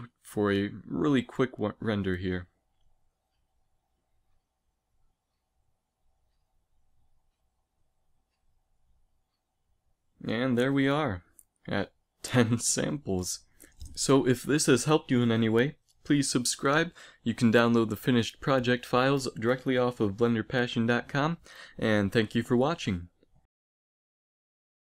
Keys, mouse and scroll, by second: 2.2-7.8 drag, 7.9 F12, 18.5-20.4 drag.